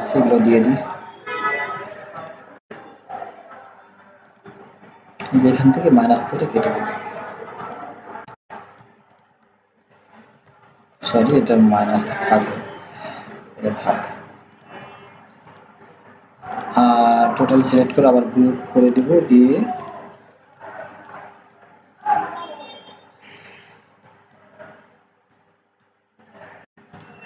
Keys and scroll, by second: 10.4 ctrl+z.